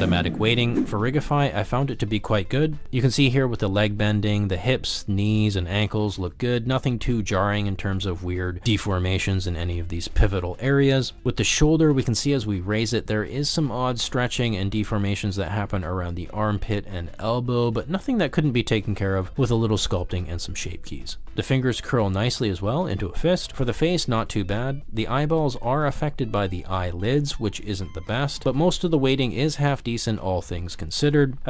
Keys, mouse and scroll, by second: 0.3 shift+middle click, 0.5 middle click, 0.8 middle click, 1.4 shift+middle click, 2.0 g, 3.1 click, 3.5 ctrl+z, 4.0 click, 4.7 g, 4.7 z, 5.1 click, 5.3 middle click, 5.6 g, 6.3 click, 7.0 shift+middle click, 7.7 r, 9.3 click, 9.6-10.8 middle drag, 10.9 shift+middle drag, 11.1 middle click, 11.3 shift+middle click, 11.5 alt+g, 11.5 alt+z, 11.5 shift+drag, 12.4 click, 12.8 shift+middle click, 13.0 g, 13.5 click, 13.7 r, 14.4 shift+middle click, 14.6 middle click, 14.8 r, 14.9 z, 15.7 drag, 15.8 middle drag, 16.2 g, 16.6 middle drag, 16.9 shift+middle drag, 17.1 middle click, 17.4-21.9 typing, 17.9 click, 18.2 drag, 18.3 middle drag, 19.6 middle click, 20.1 click, 20.7 drag, 20.9 middle click, 21.1 ctrl+middle click, 21.2 middle click, 22.6 click, 22.9 drag, 23.1 s, 23.6 click, 23.8 click, 24.0 s, 25.3 middle click, 25.7 ctrl+middle drag, 26.1 middle click, 26.5 drag, 26.7 middle click, 27.0 middle click, 27.2 g, 29.2 ctrl+z, 29.9 g, 30.9 click.